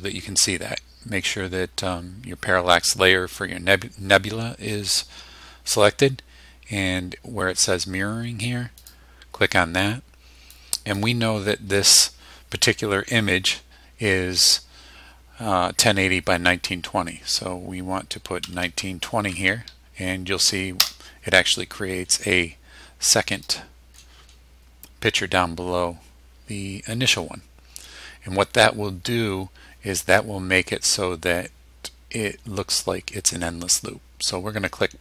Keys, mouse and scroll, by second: 8.8 click, 10.5 click, 18.4 KP_1, 18.6 KP_9, 19.0 KP_2, 19.3 KP_0, 20.8 KP_Enter, 22.0 scroll down 2, 22.7-23.4 scroll up 4, 24.2 scroll down 2, 24.8 scroll down 2.